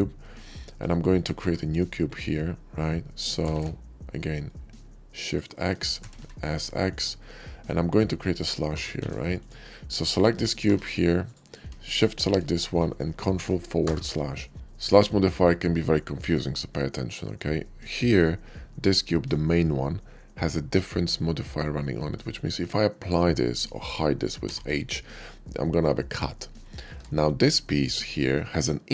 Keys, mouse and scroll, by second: 0.0-0.4 middle drag, 0.5 shift+middle drag, 1.1 shift+d, 3.4 shift+x, 5.1 click, 5.3 middle drag, 5.7 s, 6.0 x, 6.1 s, 6.8 click, 7.1-8.3 middle drag, 8.6 g, 8.7 z, 8.9 g, 9.3 drag, 9.4-9.9 middle drag, 10.3 middle click, 10.5 g, 11.1 right click, 11.4 middle click, 11.6 shift+click, 12.3 shift+middle drag, 13.8 ctrl+KP_Divide, 14.6 shift+middle drag, 16.8 shift+middle click, 17.7 shift+click, 23.4 click, 24.4 h, 26.6 ctrl+z, 27.9 click.